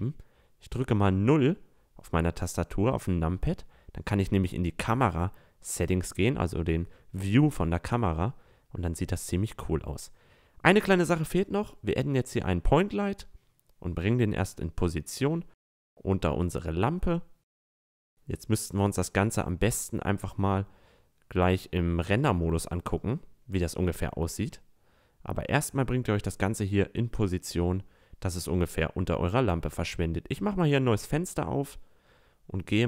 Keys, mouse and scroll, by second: 0.0 KP_0, 5.4 click, 5.7 a, 6.3-6.8 middle drag, 7.1-8.0 middle drag, 8.5-8.9 middle drag, 9.0 middle click, 11.0 click, 12.5-15.9 drag, 16.2-17.7 drag, 18.9-19.3 drag, 20.5-22.0 drag, 22.0-22.8 middle drag, 23.0-24.7 drag, 25.9 click, 29.3 click, 29.9-31.2 drag, 31.3 z, 31.8 z, 32.1 t.